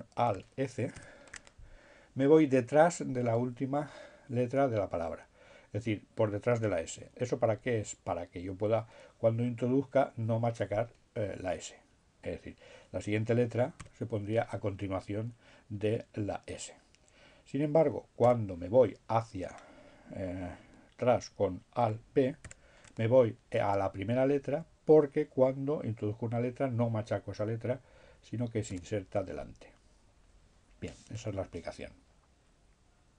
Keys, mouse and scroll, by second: 12.1 t, 16.9 BackSpace, 21.2 alt+b, 28.8 r.